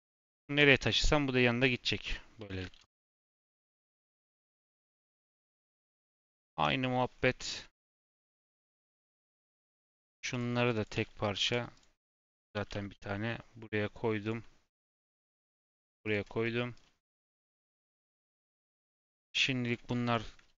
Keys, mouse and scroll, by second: 0.3 alt+g, 2.0 click, 2.3 r, 3.4 r, 4.9-5.2 scroll down 1, 5.2-5.6 scroll up 1, 5.6 click, 6.5 KP_7, 6.8-7.3 scroll up 6, 7.3-7.9 shift+middle drag, 7.9 click, 8.4 click, 8.5 g, 9.3 click, 10.3 click, 11.3 ctrl+j, 11.7 click, 12.5 g, 14.6 click, 15.0 g, 16.4 middle click, 16.7-17.8 scroll down 2, 17.8 KP_Decimal, 18.1-18.8 scroll down 10, 18.8 click, 19.1-19.6 scroll up 1, 19.6 click, 20.0 shift+click.